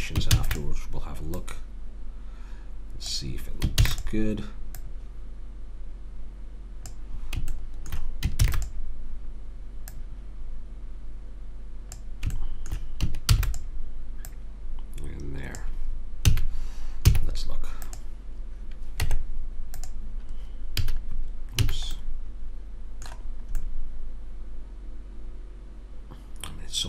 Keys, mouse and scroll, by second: 0.3 shift+d, 3.8 shift+d, 4.8 click, 8.4 shift+d, 9.9-11.3 drag, 12.4 middle click, 13.3 shift+d, 16.3 a, 17.0 z, 19.0 Tab, 20.9 a, 21.6 a, 22.0-23.8 middle drag.